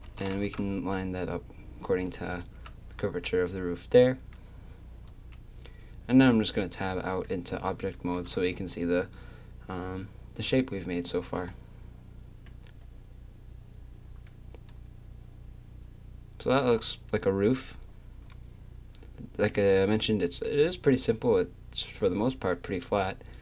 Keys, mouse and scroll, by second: 0.0 g, 5.1 Tab, 14.3-16.3 drag, 20.5-23.4 middle drag.